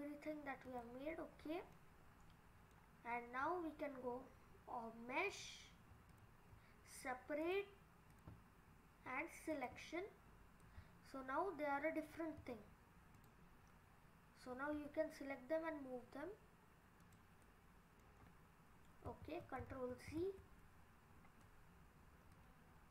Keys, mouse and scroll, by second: 1.2 scroll up 1, 1.3-2.5 scroll down 2, 1.8 middle click, 3.1 scroll down 2, 5.3 click, 6.1 click, 8.1 click, 10.3-10.6 scroll up 3, 10.6 middle click, 12.4 Tab, 13.2 click, 14.7 g, 17.5 middle click, 18.1-18.8 scroll down 3, 19.3 ctrl+z, 19.7 ctrl+z, 20.2 ctrl+z, 21.1-22.3 scroll up 3, 22.3 click.